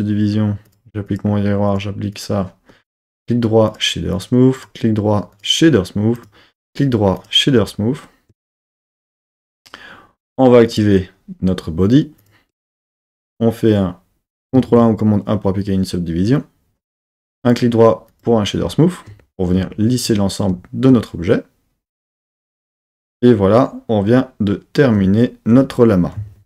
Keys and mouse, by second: 0.6-1.2 drag, 2.2 click, 3.0 right click, 4.1 click, 4.5 right click, 6.1 click, 6.6 right click, 10.6 click, 12.1 click, 14.6 super+1, 17.4 right click.